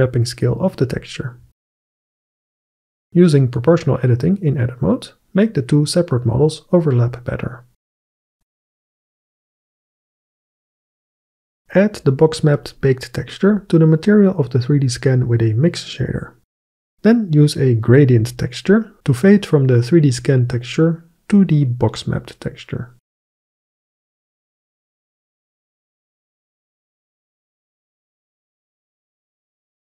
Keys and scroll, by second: 5.3 g, 6.6 g, 8.4 g, 8.6 Tab.